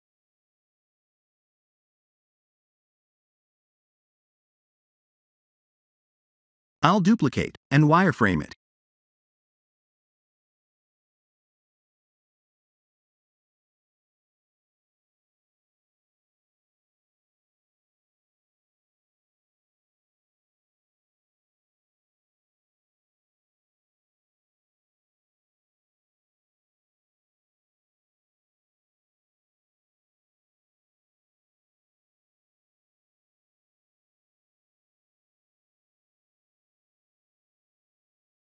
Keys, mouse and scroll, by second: 2.4 Tab, 2.9 middle click, 8.8 shift+d, 11.1 click, 11.8 click, 14.8 scroll up 3, 16.1 click, 17.8 click, 18.6 click, 21.4 click, 22.7 click, 24.9 middle click, 29.9-30.9 scroll down 3, 31.1 shift+a.